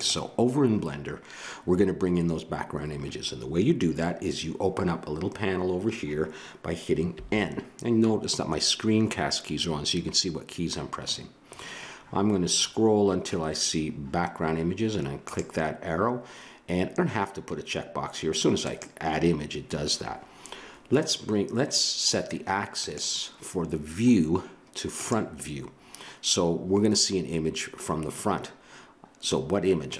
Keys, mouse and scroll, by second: 7.1 n, 11.4-15.2 middle drag, 15.2-20.4 drag, 22.8-24.6 drag, 29.9 click.